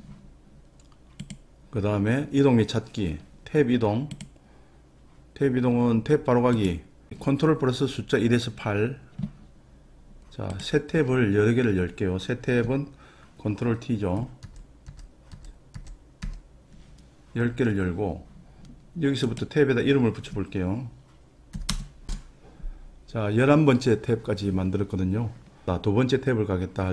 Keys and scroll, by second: 14.5 ctrl+t, 14.9 ctrl+t, 15.3 ctrl+t, 15.7 ctrl+t, 16.2 ctrl+t, 21.7 Return, 22.1 Return.